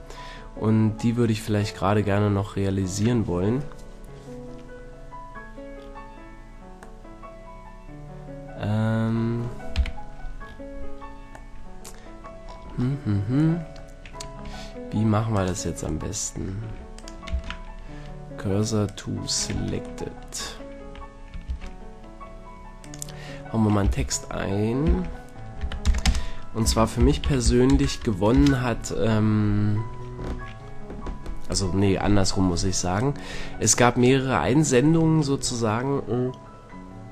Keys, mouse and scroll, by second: 2.0 middle click, 2.4-3.7 middle drag, 6.4-9.1 middle drag, 9.8 KP_5, 10.5-12.5 middle drag, 14.4 Tab, 15.4 middle click, 16.8 a, 17.3 shift+s, 19.6 Tab, 20.8 a, 21.5 shift+a, 23.8 r, 26.6 r, 33.0-34.8 drag.